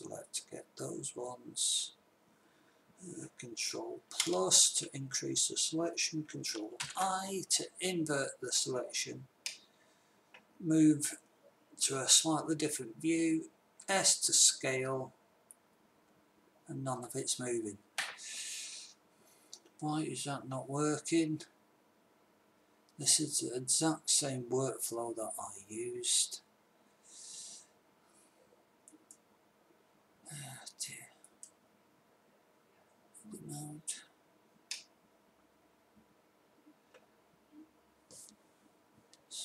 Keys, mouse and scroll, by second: 4.7 ctrl+KP_Add, 7.2 ctrl+i, 13.9 s, 31.6-33.1 drag, 37.2-39.3 middle drag.